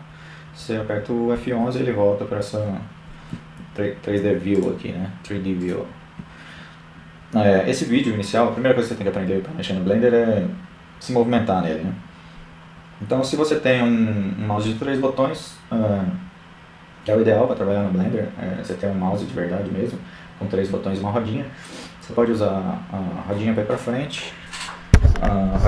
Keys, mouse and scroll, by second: 0.0 F11, 2.9-8.5 drag.